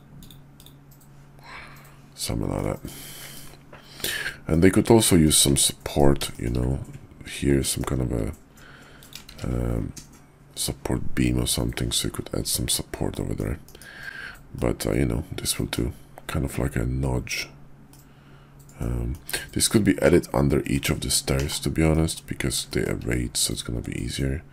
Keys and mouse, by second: 2.6-2.9 drag, 3.1 KP_5, 4.5-5.2 drag, 5.4 `, 5.8 KP_5, 6.3 shift+click, 8.8 click, 9.3 shift+a, 13.1 middle drag, 13.6 KP_5, 14.4-15.7 middle drag, 17.8-19.1 middle drag, 20.0 /, 20.5 middle drag, 21.3 /, 21.8 middle drag, 22.6 shift+middle drag, 23.4 click, 23.7 Tab.